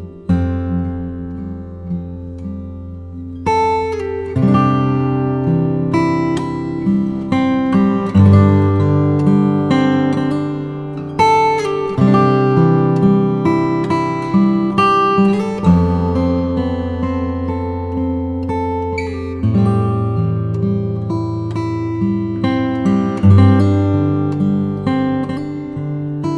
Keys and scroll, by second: 2.1 alt+shift+Return, 4.7 Return, 5.7 Left, 6.4 Up, 7.0 super+Up, 11.3 Return.